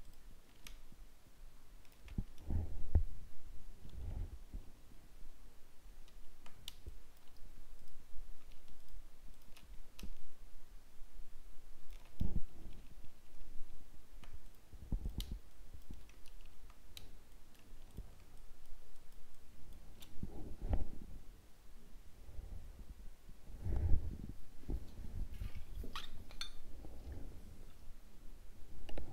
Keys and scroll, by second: 3.9 ctrl+d, 12.6 ctrl+d, 17.8 ctrl+space.